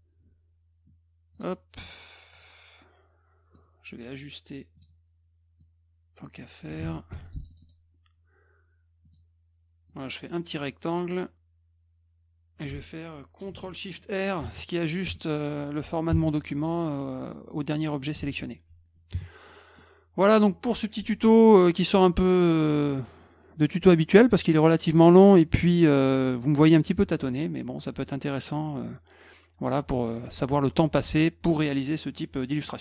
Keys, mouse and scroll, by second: 1.4 click, 2.4 click, 2.8 middle click, 4.8 click, 5.6-6.7 drag, 6.8 ctrl+z, 7.1 F1, 7.3 click, 7.4 click, 7.5 click, 7.6 click, 9.1 click, 9.9-12.6 drag, 14.4 ctrl+shift+r, 15.0 F1, 17.5 middle click, 18.2 ctrl+s, 19.8 middle click.